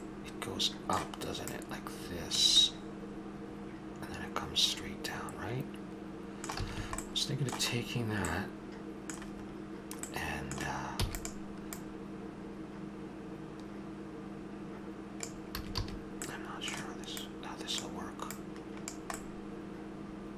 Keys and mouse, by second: 0.3-1.3 middle drag, 1.4-2.7 drag, 2.7 middle click, 3.5-4.9 middle drag, 6.6 a, 6.8 a, 10.9 e, 15.5 a, 15.8 a, 16.2 middle click, 17.2-19.1 right drag, 19.2-20.2 middle drag.